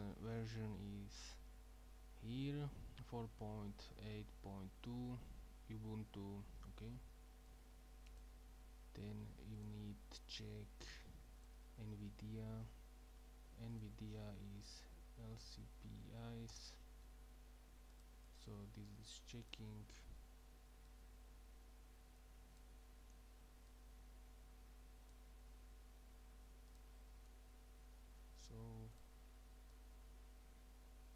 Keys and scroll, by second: 14.7 Up, 14.8 Up, 15.0 Up, 15.5 Down, 16.5 Return.